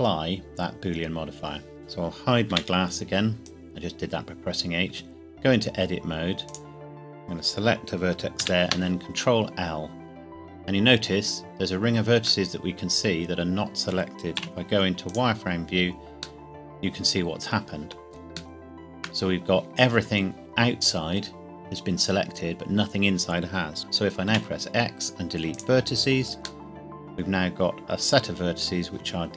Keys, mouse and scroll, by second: 2.5 h, 3.4 click, 5.1 Tab, 6.5 click, 7.1-8.1 scroll down 1, 8.4 ctrl+l, 12.4 middle click, 13.9 scroll down 1, 14.4 z, 15.0 click, 16.4 middle click, 22.5-23.8 scroll up 2, 24.4 x, 25.5 click, 26.6 middle click.